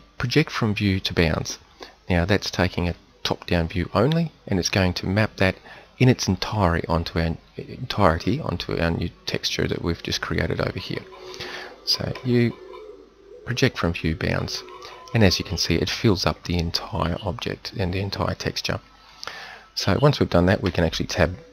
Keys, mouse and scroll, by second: 12.1 u, 20.7 Tab.